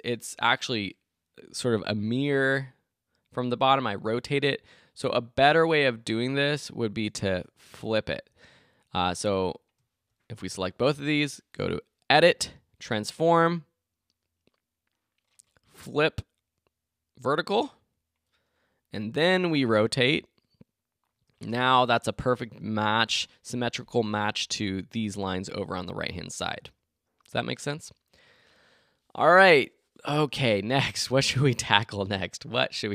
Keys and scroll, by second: 21.8 shift+Return, 22.3 Return.